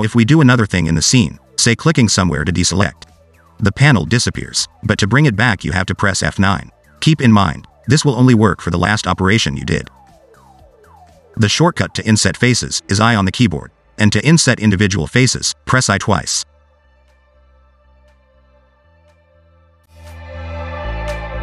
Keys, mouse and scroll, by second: 0.5 click, 3.8 click, 7.8 F9, 12.4 ctrl+z, 12.6 ctrl+z, 13.6 click, 18.9 click, 19.8 ctrl+z, 20.3 ctrl+z.